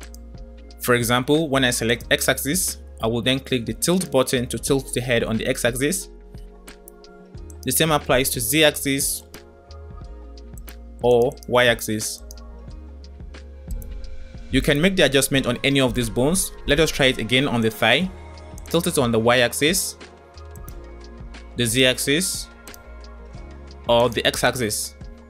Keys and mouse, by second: 0.1-1.9 drag, 4.1-6.5 drag, 7.4 click, 9.1-10.6 drag, 12.1-13.6 drag, 14.3-17.6 drag, 18.7-20.7 drag, 21.5-23.1 drag, 23.9-25.1 drag.